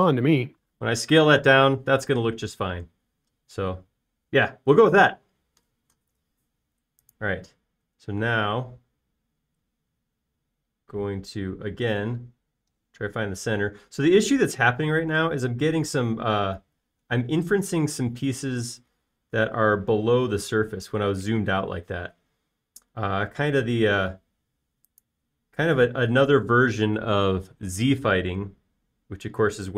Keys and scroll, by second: 9.4 c.